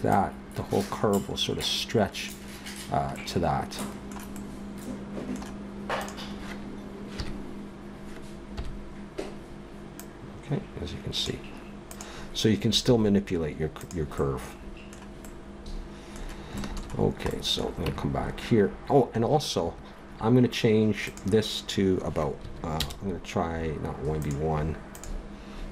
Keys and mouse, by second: 1.7 click, 6.0-7.1 right drag, 7.1 KP_3, 8.5 KP_1, 9.1 middle click, 11.9-13.7 drag, 12.8 g, 17.9 Tab, 22.6 middle click, 24.2 middle click.